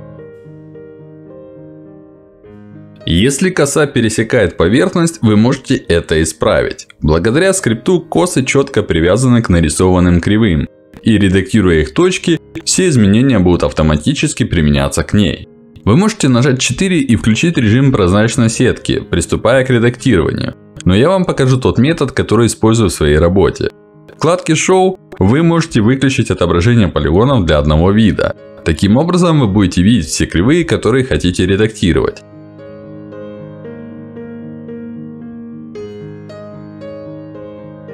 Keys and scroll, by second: 17.7 4, 21.4 5, 26.5 Escape.